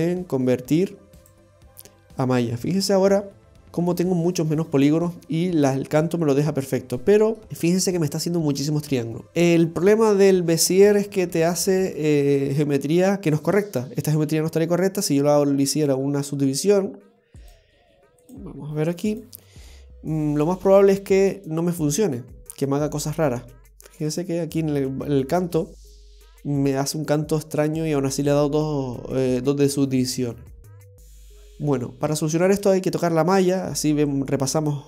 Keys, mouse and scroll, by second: 2.7 Tab, 3.8 middle click, 7.4-9.2 scroll up 3, 17.4 click, 18.2 click, 19.6 middle click, 20.4-21.2 scroll up 1, 24.1 click, 24.6 middle click, 25.9 Tab, 26.3 middle click, 31.2 click, 31.9-33.1 scroll down 2, 32.3 Tab, 33.1 middle click, 34.2 scroll up 1.